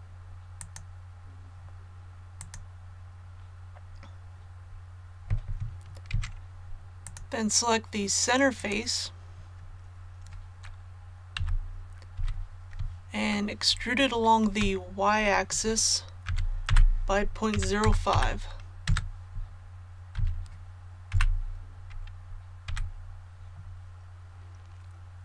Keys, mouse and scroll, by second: 0.5 click, 6.1 Tab, 7.0 click, 8.5 right click, 11.3 KP_3, 12.1 z, 13.3 shift+middle click, 14.1 scroll up 1, 16.2-18.1 typing, 20.1 z, 21.1 KP_1, 22.6 a.